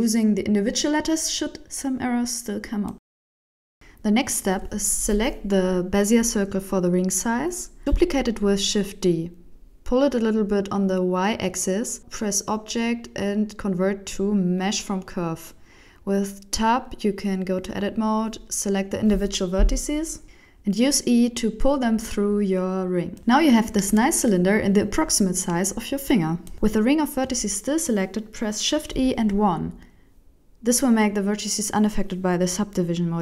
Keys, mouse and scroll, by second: 20.2 click, 20.2 n, 20.3 e, 22.3 a, 22.8 a, 23.5 alt+a, 24.1 alt+right click, 24.9 g, 25.8 middle click, 27.1 shift+e, 29.0 shift+middle click, 29.3 middle click, 31.0 alt+right click, 31.6 f, 31.8 middle click, 32.8 alt+right click.